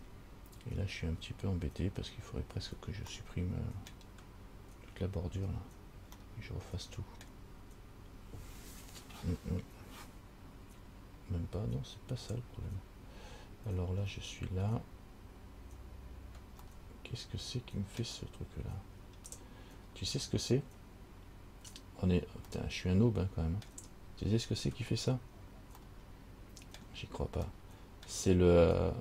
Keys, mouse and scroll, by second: 3.3 middle click, 6.4 middle click, 17.0 middle click, 18.9-19.9 scroll up 2, 20.0 scroll down 3, 22.7 middle click, 25.1-25.8 scroll up 1, 26.0 middle click, 27.7 middle click.